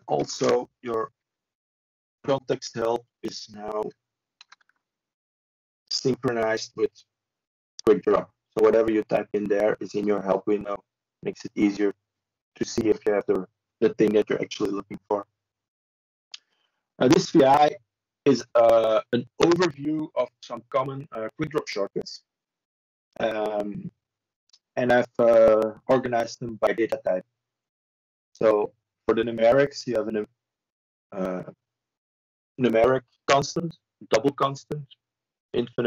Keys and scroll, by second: 1.3 b, 9.3 ctrl+shift+Return, 11.2 c, 24.3 Tab.